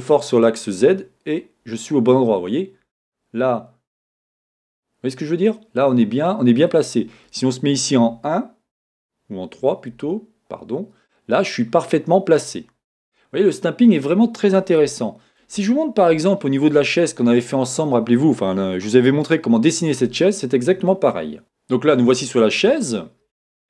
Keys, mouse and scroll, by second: 6.8 click, 8.0 KP_1, 9.9 KP_3, 12.6 scroll down 2, 13.1-20.3 middle drag, 14.9 scroll up 2, 21.6-22.8 shift+middle drag, 22.8-23.6 scroll up 2.